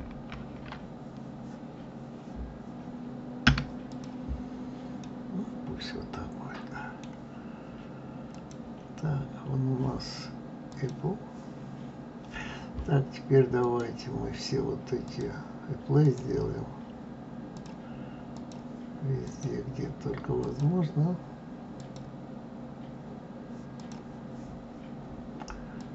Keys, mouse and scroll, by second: 0.3 ctrl+shift+b, 3.9 click, 5.0-8.0 middle drag, 8.3 click, 10.6-13.7 drag, 15.0-16.1 drag, 17.5 click, 18.4-19.4 drag, 20.4-21.9 drag, 23.7 click, 25.7 click.